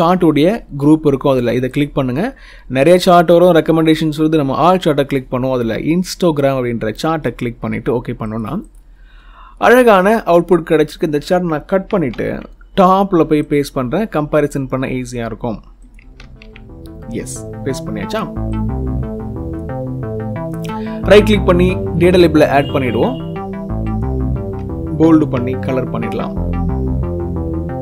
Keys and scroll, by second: 12.6 ctrl+x, 16.0 ctrl+v, 24.9 ctrl+b.